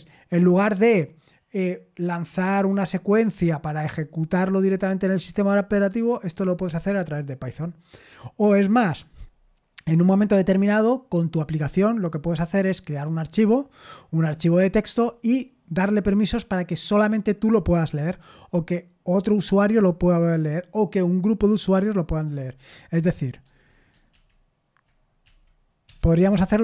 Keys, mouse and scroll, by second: 24.1 super+l, 25.2-26.6 typing.